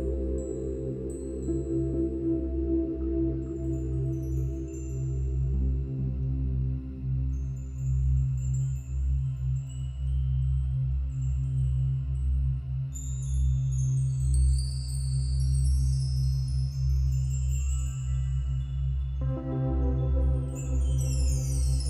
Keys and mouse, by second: 0.3 3, 0.9-3.3 ctrl+alt+drag, 2.6-3.7 typing, 5.2 click, 5.9 typing, 7.0-11.4 ctrl+alt+drag, 14.6-15.0 ctrl+alt+drag, 15.8-17.4 ctrl+alt+drag, 17.5-18.4 drag, 19.3-20.3 drag.